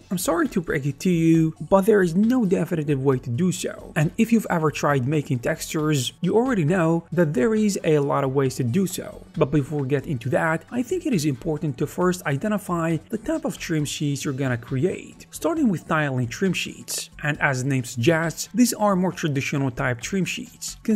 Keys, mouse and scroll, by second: 0.5 g, 1.4 alt+s, 7.4 shift+middle click, 7.4 right click, 7.8 ctrl+b, 9.3-10.8 typing, 9.4 Tab, 10.9 middle click, 10.9 shift+right click, 11.0 right click, 11.2 shift+right click, 11.4 ctrl+middle click, 11.5 alt+s, 11.5 shift+middle click.